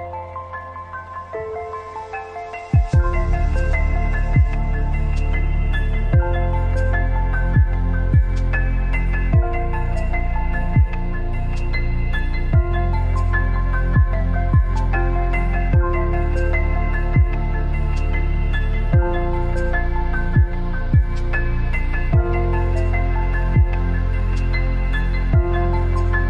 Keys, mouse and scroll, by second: 2.1-4.2 drag, 5.6 right click, 7.0 click, 7.0 k, 8.3 alt+scroll up 1, 10.4 click, 11.1 ctrl+t, 12.6-17.2 alt+shift+drag, 17.2 Left, 18.2 Up, 21.0 Left, 23.2 click.